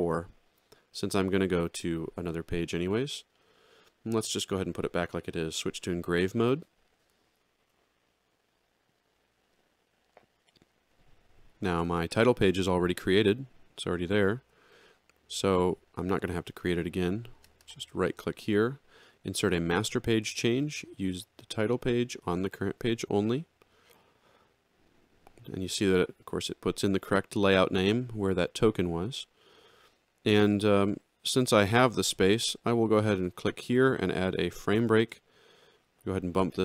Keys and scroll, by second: 7.2 ctrl+3, 14.4 alt+x, 35.0 shift+f.